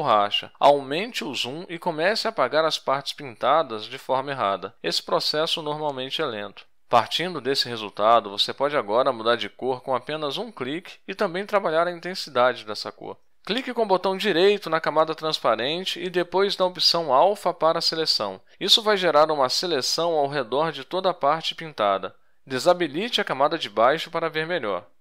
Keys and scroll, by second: 0.8-2.4 typing, 9.1 ctrl+shift+j, 10.3 Tab, 10.8 ctrl+shift+j.